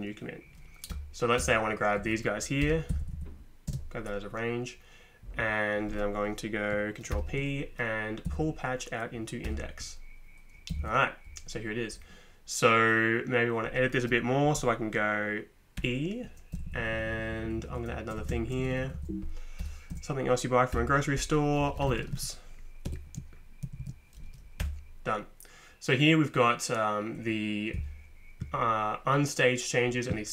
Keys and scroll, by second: 0.9 Return, 1.4 Return, 2.0 Up, 2.6 v, 2.9 Down, 3.1 Down, 3.7 space, 7.1 ctrl+p, 8.3 Down, 9.4 Return, 10.7 Left, 10.8 Left, 15.8 e, 16.5 Down, 16.8 Down, 16.9 Down, 17.1 Down, 17.2 Down, 17.9 Right, 18.2 Up, 18.3 Right, 18.4 Right, 18.6 Right, 18.7 Right, 18.9 Right, 19.6 j, 19.9 Right, 20.7 Return, 21.4-23.8 typing, 24.6 Return.